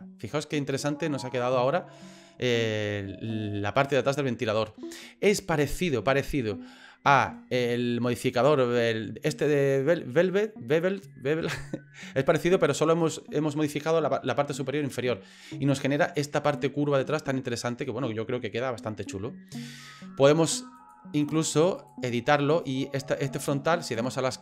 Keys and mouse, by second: 7.5-11.6 drag, 12.2 middle click, 16.2 middle click, 17.1-18.8 middle drag, 19.0 middle click, 20.8 click, 21.3 click, 22.5 right click, 23.9 click.